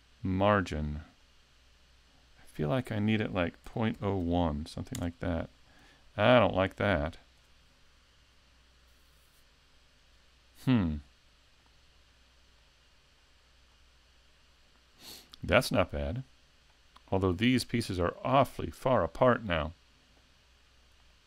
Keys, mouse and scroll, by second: 11.6 click.